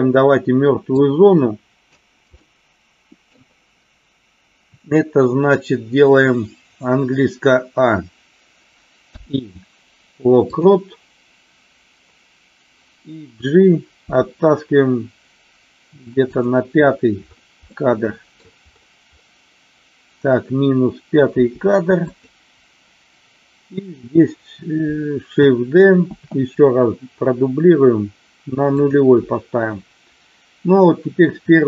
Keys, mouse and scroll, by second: 1.1 click, 2.3 middle click, 13.9 g, 16.2 click, 17.6 middle click, 21.4 g, 21.9 click, 26.1 shift+d, 28.7 click.